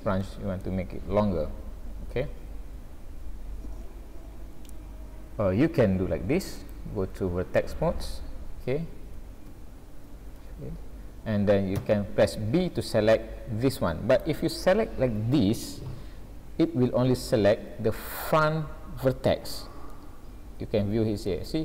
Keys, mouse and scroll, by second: 0.2 shift+scroll up 1, 0.2 shift+middle click, 6.6 click, 9.0 a, 10.4 alt+a, 11.8 b, 16.0-17.7 scroll up 7, 19.9 middle click, 21.5 scroll up 1.